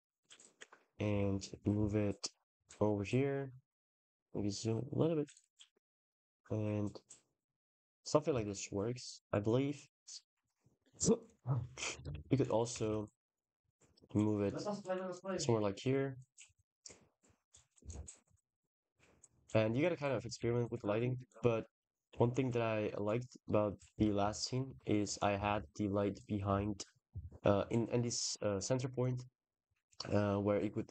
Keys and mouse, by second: 0.2 g, 0.4 x, 1.4 y, 3.7 g, 3.9 z, 4.1 z, 5.3 g, 5.6 x, 6.0 y, 8.2 ctrl+s, 11.9 shift+d, 12.5 r, 12.7 r, 14.6 g, 17.6 x, 18.3 click, 20.2 ctrl+s, 21.1 click, 21.5 click, 23.8-25.4 typing, 26.1 middle click, 26.9 KP_0.